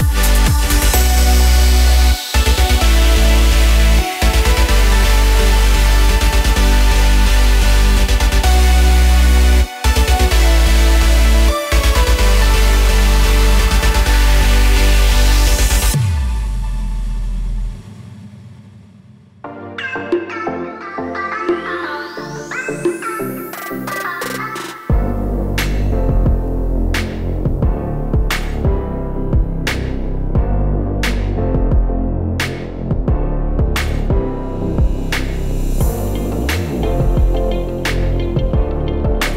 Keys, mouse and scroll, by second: 2.6 click, 4.1 click, 4.8 middle click, 5.5 scroll down 4, 6.2 click, 7.2 click, 7.9 s, 9.3 click, 10.4 click, 12.6 KP_0, 14.4 click, 14.5 KP_0, 15.3 KP_0, 16.3 click, 19.4 click, 21.5 click, 25.8-26.2 scroll down 2, 26.5 middle click, 26.5 scroll down 3, 27.2-27.5 scroll down 1, 28.1 s, 29.8 KP_0, 30.5-30.9 scroll up 7, 31.4 scroll down 1.